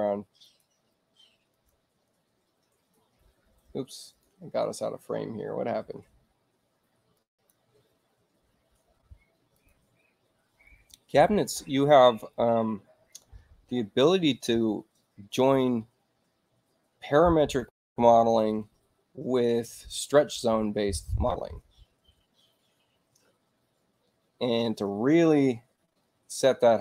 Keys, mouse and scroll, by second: 0.1-2.3 middle drag, 2.3 click, 4.6 click, 7.6 click, 10.0 click.